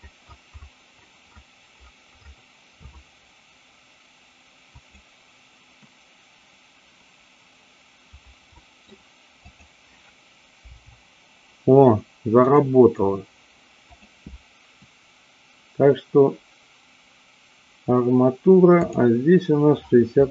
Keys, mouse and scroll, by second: 8.6 middle click, 9.3-10.4 drag, 10.7 g, 12.4 click, 13.9 click, 18.8-20.3 drag.